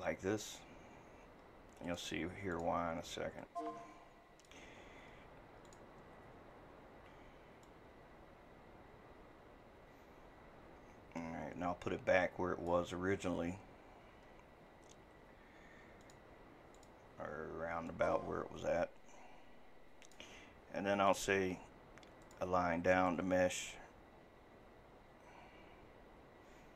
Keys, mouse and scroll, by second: 13.1-16.0 scroll, 16.0 ctrl+x, 21.1-21.6 scroll, 21.1 ].